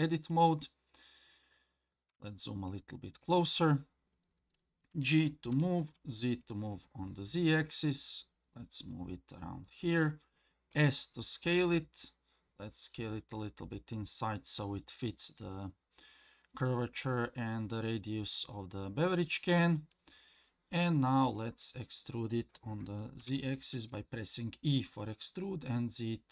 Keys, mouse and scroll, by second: 1.6-2.1 scroll up 2, 2.3 shift+middle click, 4.9 g, 21.3 e.